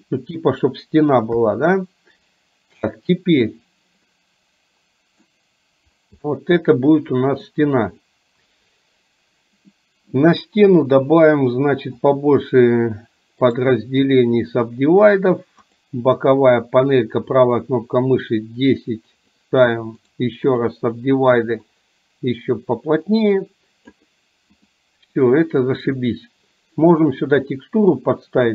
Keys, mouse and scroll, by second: 1.5 KP_3, 4.1-5.4 middle drag, 6.2-7.5 middle drag, 9.9-10.2 middle drag, 11.1-12.4 drag, 18.4-19.4 drag, 21.7-24.0 drag, 24.7 click, 27.6-28.1 middle drag.